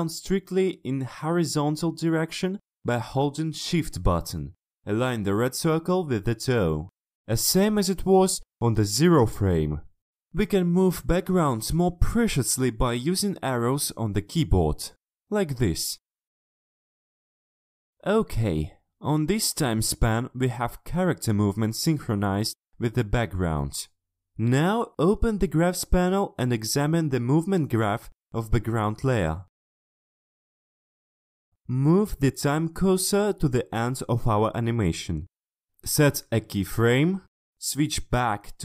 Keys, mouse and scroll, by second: 0.0-1.0 ctrl+scroll down 4, 1.3 ctrl+middle click, 2.6 shift+click, 4.9 shift+click, 6.2-7.5 shift+drag, 8.5 ctrl+shift+scroll up 2, 9.2 ctrl+scroll up 2, 9.9 middle click, 10.4 click, 11.4 BackSpace, 16.0-17.8 ctrl+scroll down 3, 17.8 ctrl+middle click, 19.0 click, 19.4 click, 20.6 click, 22.4 click, 25.7 click, 27.3 click, 27.8-28.4 scroll down 1, 28.4 click, 28.6-29.3 scroll down 1, 29.3 click, 31.1 click, 31.7-35.8 scroll down 2, 35.8 click, 36.1-36.9 scroll down 1, 36.9 click, 37.7 right click, 38.3 click.